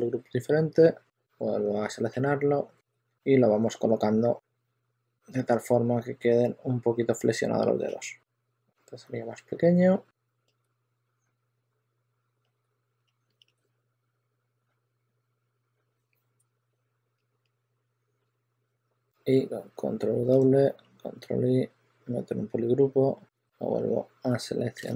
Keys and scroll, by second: 0.9 w, 1.8 q, 2.8 e, 6.4 w, 9.8-13.6 typing, 14.7 typing, 16.6-17.4 typing, 18.8 w, 21.6 super+w, 24.7 super+a.